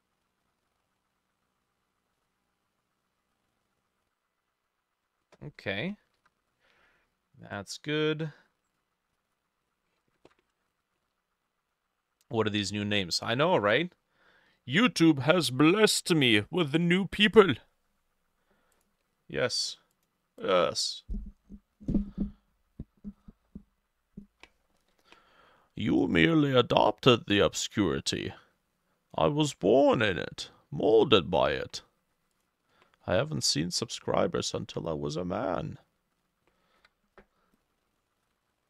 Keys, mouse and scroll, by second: 6.2-12.2 drag, 6.2 t, 10.2 ctrl+shift+a, 20.4-22.4 drag, 33.3-36.7 drag, 33.3 e, 34.5 ctrl+shift+middle click, 34.6 ctrl+shift+a, 36.8 b, 38.0 shift+click, 38.5 ctrl+z.